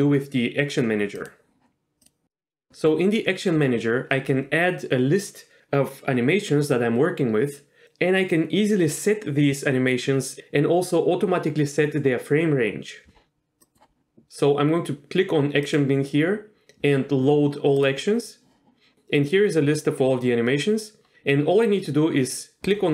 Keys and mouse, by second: 2.0-2.9 drag, 13.6 click, 15.6-18.5 drag.